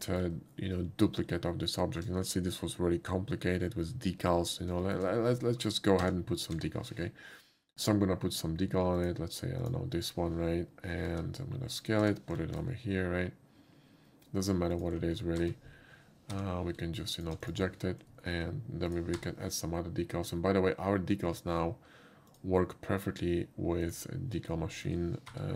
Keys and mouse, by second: 0.0 middle click, 1.8 shift+middle click, 4.8 shift+middle click, 6.4 w, 6.5 d, 7.8 click, 9.0 click, 9.6 drag, 11.5 s, 11.7 click, 12.0 g, 12.5 F5, 14.8 click, 15.4 d, 17.2 alt+d, 17.2 click, 17.4 click, 18.3 middle click, 18.9 shift+click, 19.2 d, 22.3 click, 23.9 click, 24.8 shift+middle click, 25.3 d.